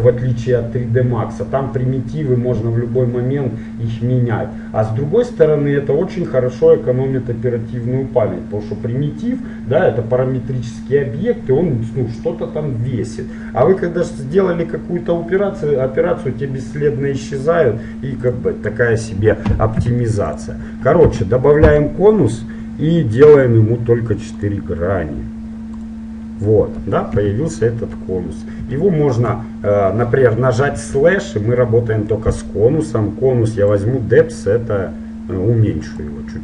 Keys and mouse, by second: 18.5-20.3 drag, 19.9 x, 25.9-27.7 drag, 27.2 KP_7, 28.3 middle click, 30.7-33.9 middle drag, 30.9 KP_Divide, 33.9-35.8 drag.